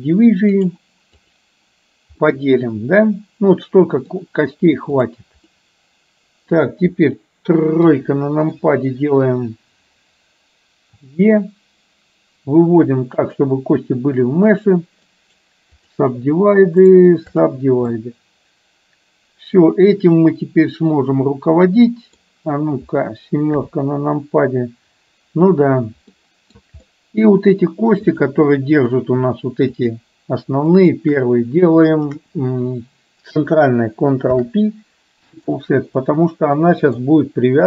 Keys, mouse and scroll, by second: 0.8 right click, 2.3-4.2 middle drag, 5.1 click, 5.7 middle click, 7.8 KP_3, 11.1 e, 14.6 click, 15.2 right click, 17.0 right click, 18.1-22.2 middle drag, 23.6 KP_7, 26.2 middle click, 27.0 middle click, 29.8 shift+click, 30.8 shift+click, 32.1 shift+click, 34.3 ctrl+p, 36.1-37.1 middle drag.